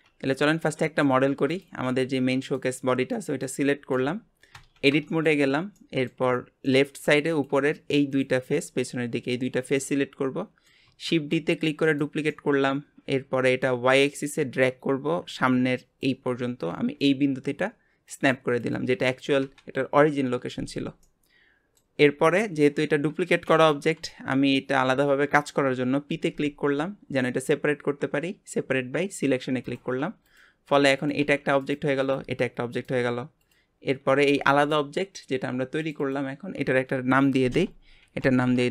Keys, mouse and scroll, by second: 0.8-1.2 shift+middle drag, 1.2 scroll down 1, 1.5 click, 1.8 g, 3.1-4.5 middle drag, 4.5 Tab, 5.1-6.3 shift+middle drag, 6.3 scroll up 1, 6.7 middle click, 7.3 click, 8.1 shift+click, 8.5 middle click, 9.4-9.8 scroll down 1, 9.8-11.1 middle drag, 11.1 shift+d, 12.3-14.3 middle drag, 14.3 click, 21.0-22.2 middle drag, 22.2-22.7 scroll up 1, 22.7-25.7 scroll up 1, 26.1 p, 30.2 click, 30.7 Tab, 31.0 click, 31.2 g, 32.0 click, 32.2 g, 33.4 click, 34.2 g, 35.8 click, 36.0-38.7 drag.